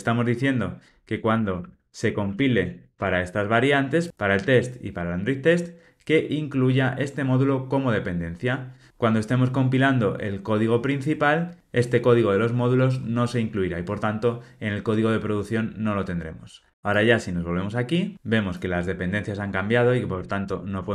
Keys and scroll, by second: 20.1 super+BackSpace.